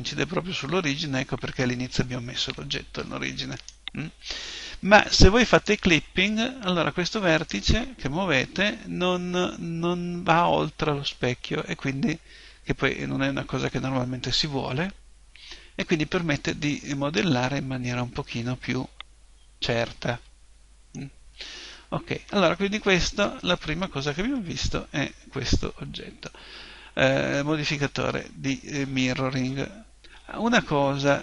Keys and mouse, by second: 3.7 right click, 5.6 click, 7.4-8.4 right drag, 8.4 g, 16.5 click, 18.7-31.2 middle drag.